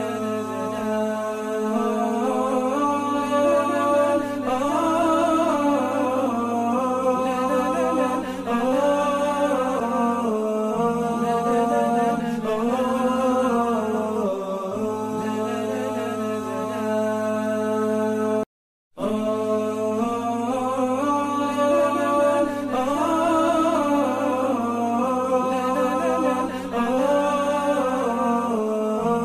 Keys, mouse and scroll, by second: 1.5 Return, 3.3 space, 7.9 alt+scroll down 1, 8.4-8.8 alt+scroll down 1, 9.8-10.2 alt+scroll down 1, 10.8 space, 13.0-13.9 typing, 14.2 scroll down 1, 15.3-16.1 typing, 16.4 double click, 17.0 ctrl+a, 17.4 ctrl+c, 21.6 double click, 27.6 typing.